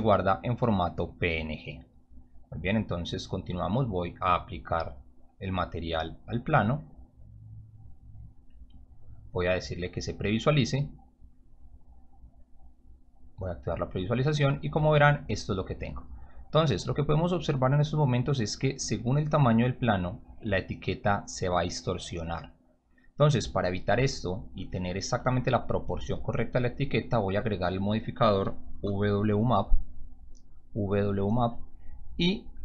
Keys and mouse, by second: 1.1 click, 2.6 click, 5.3-6.4 drag, 8.2 click, 9.7 click, 11.6 click, 12.9 click, 16.5 click, 19.7-23.2 drag, 27.3 click, 28.7 u, 31.1 click, 32.4-32.6 drag.